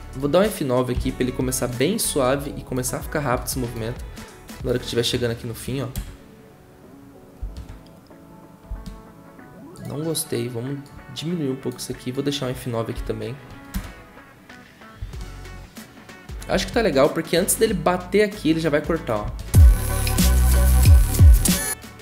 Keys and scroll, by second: 7.4 0, 12.9 F9, 13.7 0, 16.5 ctrl+w.